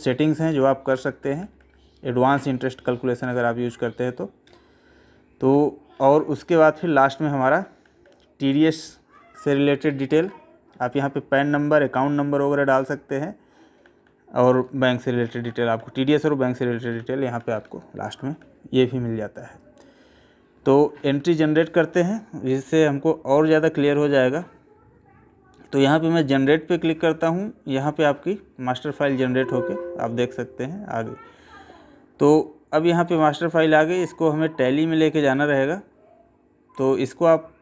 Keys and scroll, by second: 0.3 Left, 2.2 Right, 7.7 Left, 8.5 Right, 10.2 Left, 10.7 Right, 12.4 Right, 13.8 Left.